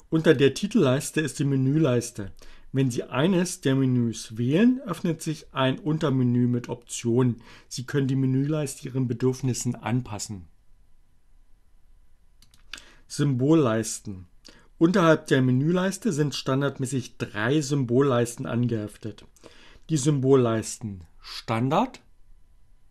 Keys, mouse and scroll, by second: 12.1 click.